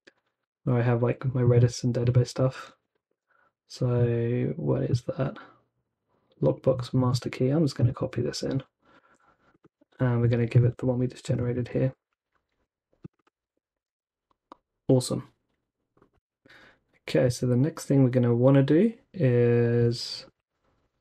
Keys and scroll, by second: 0.0-0.3 typing, 2.7 Escape, 3.0 typing, 4.9 typing, 9.0 super+c, 9.8 super+v, 11.5 super+c, 12.6 Escape, 13.5 super+v, 13.8 super+s.